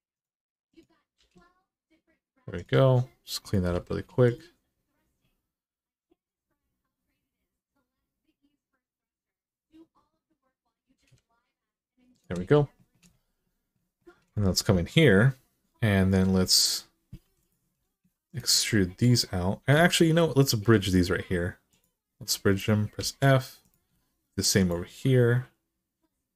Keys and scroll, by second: 0.9 g, 3.4 g, 10.7 g, 17.0 2, 22.7 f.